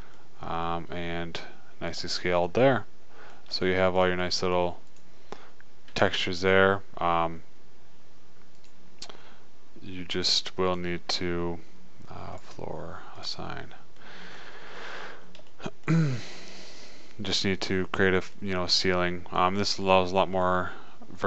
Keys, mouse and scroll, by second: 5.2-7.9 drag, 6.4 a, 8.7 middle click, 18.3 middle click, 19.1-21.2 middle drag.